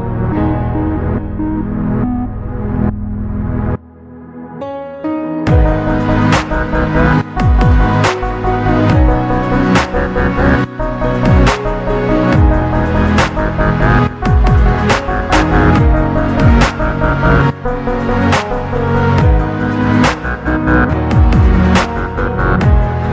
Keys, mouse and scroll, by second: 1.5 click, 2.2-3.7 scroll up 4, 3.7 Tab, 4.4 click, 5.7 KP_7, 7.3 r, 9.7 click, 10.9-12.3 drag, 13.0 scroll up 1, 13.1-13.9 scroll down 1, 14.2-15.3 drag, 16.2 click, 17.5 g, 19.6 click, 20.2 click, 20.8 g, 22.8 click.